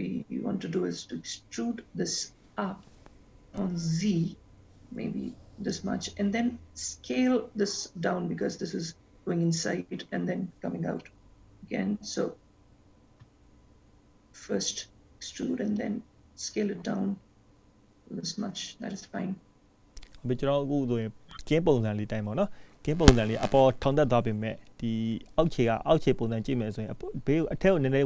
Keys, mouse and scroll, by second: 1.9 e, 13.3 s.